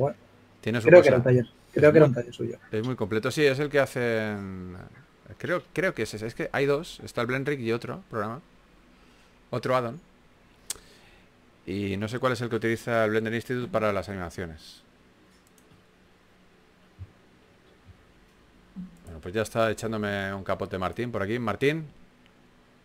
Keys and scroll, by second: 3.7 typing, 5.7-6.8 typing, 12.5-13.8 typing, 15.3 typing, 18.8-19.5 typing, 22.0 typing.